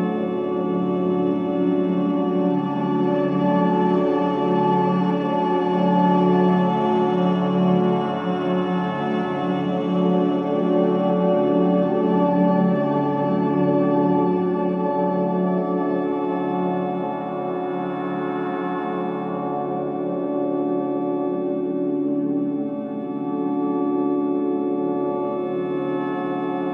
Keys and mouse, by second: 0.0 typing, 4.6 click, 5.8 click, 6.4 click, 7.5 click, 8.4-9.3 alt+drag, 10.1 click, 12.4-14.6 drag, 14.6 alt+middle drag, 14.6 alt+click, 14.8 alt+middle click, 15.7-17.5 alt+drag, 17.5 alt+middle click, 17.6 alt+click, 17.7 alt+middle click, 17.8 alt+click, 17.9 alt+middle click, 18.0-18.9 alt+drag, 18.9 alt+middle click, 19.4 alt+click, 20.3 alt+shift+click, 20.8 ctrl+alt+click, 21.3-22.7 ctrl+alt+drag, 22.8 Tab, 24.2-25.5 drag, 26.3 ctrl+alt+click.